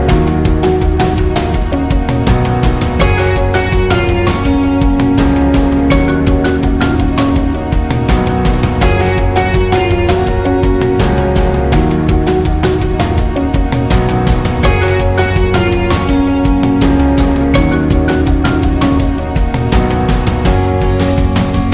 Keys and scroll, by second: 3.2-4.0 space, 5.2 space.